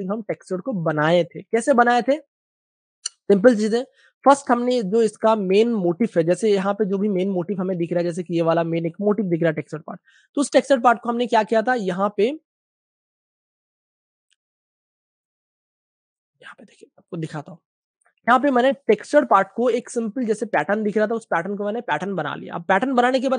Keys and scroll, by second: 0.9 typing, 3.6-4.9 typing, 6.2 super+space, 7.8 super+space, 7.9 super+space, 8.5 typing, 9.3 super+space, 10.1 space, 14.5 space, 17.2 super+BackSpace, 18.0 super+space, 19.7 space.